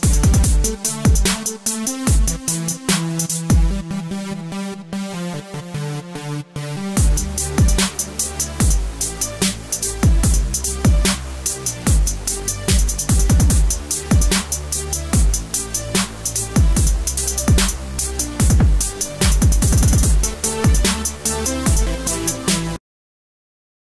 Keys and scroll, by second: 6.2 ctrl+s.